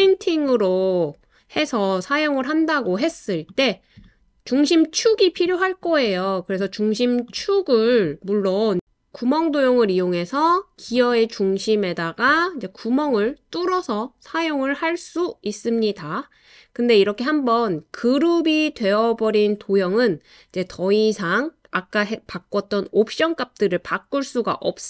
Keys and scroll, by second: 10.5 super+z, 14.9 typing, 16.5 typing.